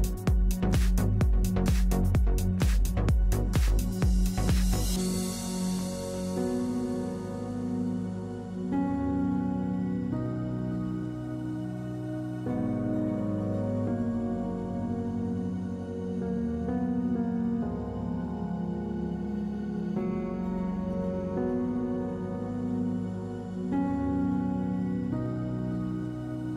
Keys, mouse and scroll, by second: 2.2 z, 4.2 Tab, 6.3 Tab, 6.7 z, 7.2-8.6 drag, 7.9 z, 8.6-10.1 middle drag, 9.0 alt+e, 10.1 click, 13.0-14.1 drag, 14.1 KP_Divide, 15.7-17.3 middle drag, 16.3 a, 17.3 BackSpace, 18.2 ctrl+Tab, 18.8 z, 19.3 z, 20.4-22.0 middle drag, 20.7 ctrl+w, 25.2 click, 26.2 a.